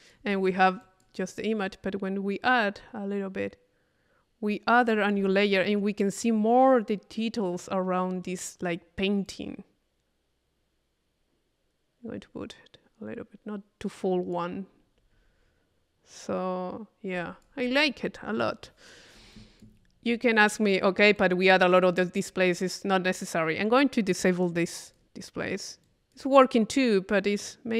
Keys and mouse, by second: 0.8 click, 1.7-5.3 drag, 5.8 click, 9.3-14.7 drag, 15.0-16.3 middle drag, 16.4 middle click, 17.2-18.6 drag, 19.3 click, 20.0-21.0 middle drag, 21.2-22.7 drag, 24.9 click, 25.9 click.